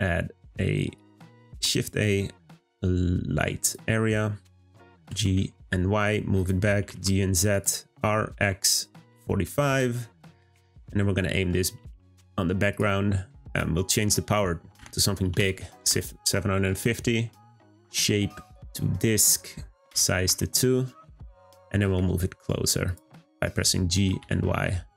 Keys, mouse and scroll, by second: 0.9 click, 1.4 shift+a, 10.6-11.7 shift+middle drag, 11.7 g, 13.4-16.5 drag, 17.6-22.7 drag.